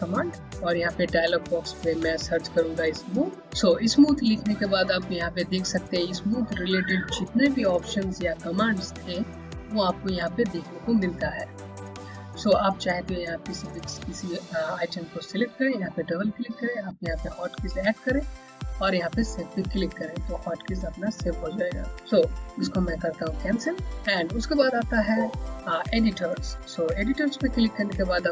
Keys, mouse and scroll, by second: 4.7 typing, 14.7 click, 23.7 click, 27.2 click.